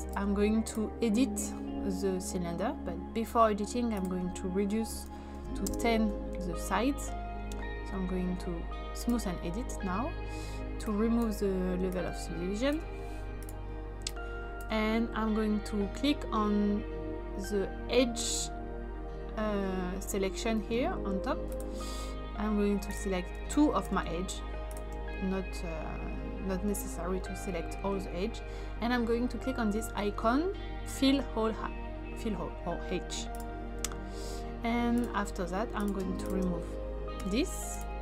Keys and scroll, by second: 4.7-5.5 typing, 5.6 Return, 37.1 typing.